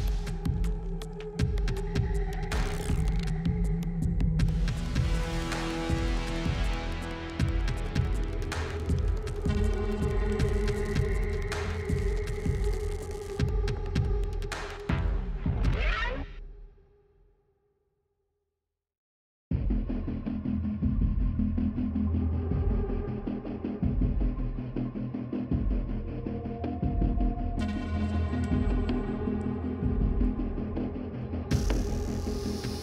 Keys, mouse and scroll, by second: 1.5-2.6 typing, 3.8-4.5 typing, 6.5 click, 7.3 click, 8.9-12.1 typing, 13.3 click, 15.7 click, 16.2 click, 16.9-18.0 typing, 19.9 space, 21.4-23.5 typing, 24.0 click, 24.2 right click, 26.0 click, 27.3 click, 29.7-31.0 typing, 31.9 click, 32.1 click.